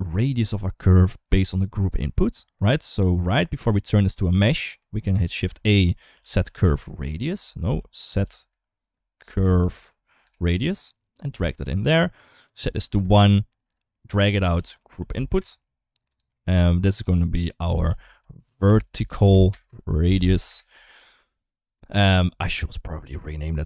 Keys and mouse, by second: 2.7 middle click, 3.5 click, 4.3 middle click, 5.1 shift+a, 7.6 shift+a, 11.1 g, 12.2 click, 14.0-16.0 drag, 16.8-20.3 drag, 22.8 n.